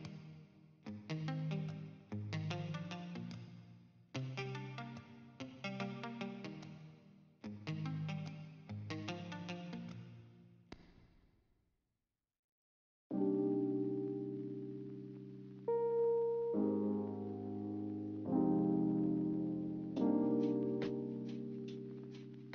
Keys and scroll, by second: 14.0 d.